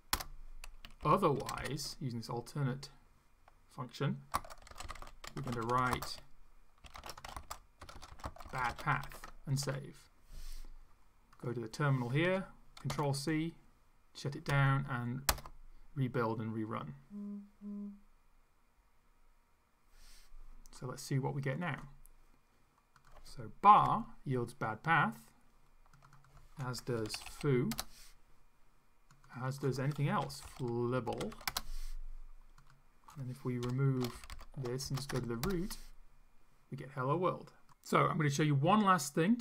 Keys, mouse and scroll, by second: 0.2 Return, 1.0 shift+,, 1.4 shift+\, 1.6 shift+., 4.4-9.4 typing, 9.5 ctrl+shift+s, 11.4 click, 12.9 ctrl+c, 14.5 Up, 15.3 Return, 21.5 click, 23.0 click, 23.8 F5, 26.0 click, 26.7-27.6 typing, 27.7 Return, 29.1 click, 29.9-31.9 typing, 32.6 click, 33.7 End, 34.2 ctrl+shift+Left, 35.1 ctrl+shift+BackSpace, 35.4 ctrl+shift+Return.